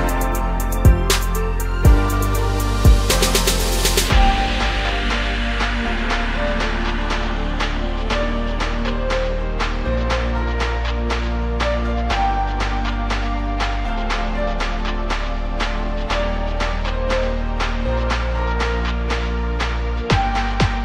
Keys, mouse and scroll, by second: 0.0-2.0 middle drag, 2.0 drag, 2.2 middle drag, 2.4-2.8 scroll up 1, 2.8 KP_1, 5.3-13.5 drag, 13.6 scroll down 2, 13.8-15.4 middle drag, 15.4 click, 16.2 click, 16.3-17.0 drag, 17.4-18.4 drag, 18.4-19.6 scroll down 6, 19.6 click, 20.0 middle click, 20.3-20.7 scroll up 1, 20.7 KP_1.